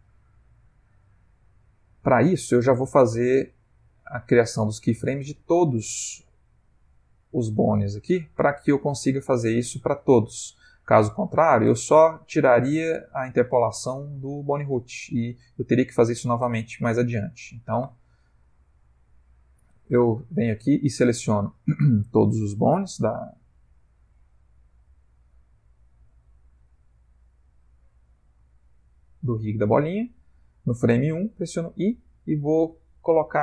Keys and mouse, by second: 2.0 click, 6.4 click, 7.0 click, 7.6 click, 8.2 click, 8.6 click, 9.1 click, 9.9 click, 17.8 a, 19.3 click, 23.3 click, 24.2 ctrl+Tab, 24.6 click, 25.3 click, 26.0 ctrl+Tab, 26.7 a, 28.5 shift+middle click.